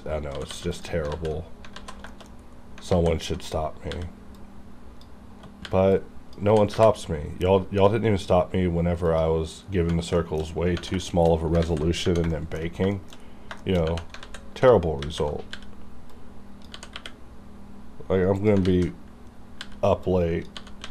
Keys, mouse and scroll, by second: 0.0-0.5 typing, 0.7 click, 1.1 alt+z, 1.4 scroll down 1, 1.8 alt+z, 2.1 shift+middle click, 2.3 scroll up 1, 2.9 alt+a, 3.9 b, 4.4 click, 5.6 b, 5.9 click, 6.5 g, 9.0 g, 9.1 click, 9.5 scroll down 1, 10.2 shift+middle click, 10.4-10.8 shift+scroll down 2, 11.0 shift+middle click, 11.4 scroll up 1, 11.6 alt+z, 12.0 Tab, 12.3 shift+middle click, 12.9 shift+middle click, 13.2 scroll up 2, 13.6 shift+middle click, 13.8 shift+scroll up 2, 14.2 alt+z, 15.0 alt+a, 15.5 b, 16.1 click, 16.7 g, 18.4 click, 18.4 y, 18.4 click, 18.6 alt+a, 19.6 b, 20.0 click, 20.6 g, 20.8 x.